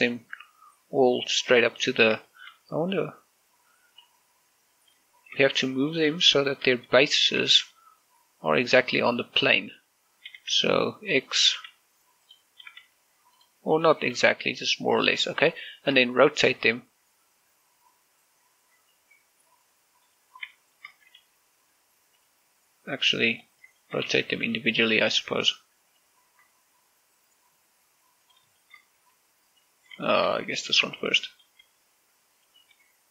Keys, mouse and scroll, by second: 0.5 scroll up 1, 0.9-2.7 middle drag, 2.7 scroll up 1, 3.1-5.0 shift+middle drag, 5.0 scroll down 1, 6.1-6.9 scroll up 1, 7.3 shift+middle click, 7.5 scroll up 1, 8.2 g, 8.4 x, 10.5 right click, 11.1-13.6 typing, 11.9 click, 13.1 click, 14.1 click, 14.9 g, 15.3 x, 15.9 click, 16.1 scroll down 1, 16.9 shift+middle click, 17.4 r, 20.8 right click, 21.1 scroll down 1, 21.3 shift+middle click, 21.9 g, 22.9 right click, 24.1 click, 24.3 click, 24.5 shift+middle click, 24.9-25.9 typing, 25.3 click, 25.6 click, 26.7 right click, 29.0 shift+click, 29.5 shift+middle click, 29.7 r, 30.3 right click, 30.9 shift+middle click, 31.5-33.1 typing.